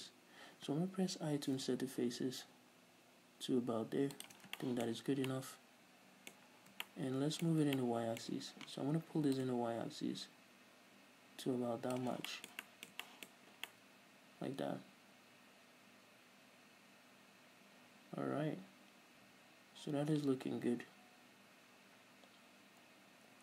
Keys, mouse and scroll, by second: 4.6 shift+click, 4.7 scroll down 2, 4.8-5.2 shift+middle drag, 5.4 scroll up 2, 5.6-8.4 middle drag, 9.7-12.6 drag, 12.6-13.6 shift+middle drag, 13.6-14.7 middle drag, 13.6 scroll up 2, 17.8-22.6 middle drag.